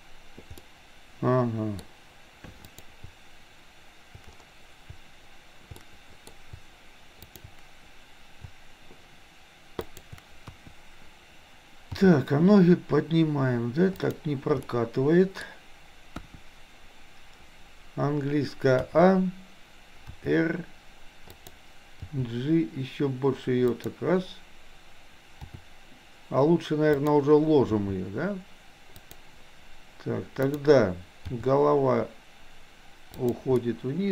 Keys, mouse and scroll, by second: 0.6-1.8 middle drag, 1.8-2.6 scroll down 1, 2.6 click, 5.9-6.3 middle drag, 9.9 shift+click, 10.5 KP_1, 12.0 g, 14.6 scroll up 1, 14.9 middle click, 15.5-16.1 scroll down 1, 16.1 KP_1, 18.9 a, 20.1 r, 22.1 g, 25.5 r, 27.6 g, 30.5 click, 31.4 g, 33.6-34.1 middle drag, 33.6-34.1 scroll up 1.